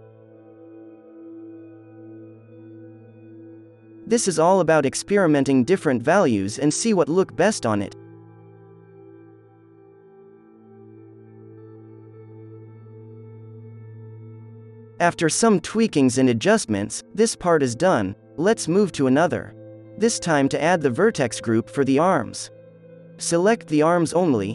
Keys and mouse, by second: 1.3-2.6 middle drag, 2.9-4.7 drag, 4.1-7.6 middle drag, 5.4 z, 7.6-9.3 drag, 7.8 alt+a, 8.6 ctrl+s, 9.9-13.6 drag, 14.8 click, 15.2 ctrl+s, 15.7-22.2 drag, 22.3 h, 22.3-24.5 drag.